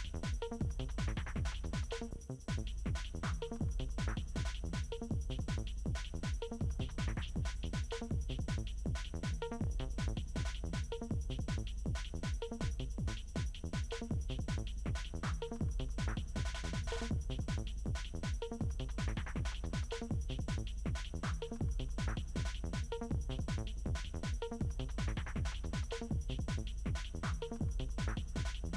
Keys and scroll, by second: 21.8 ctrl+d.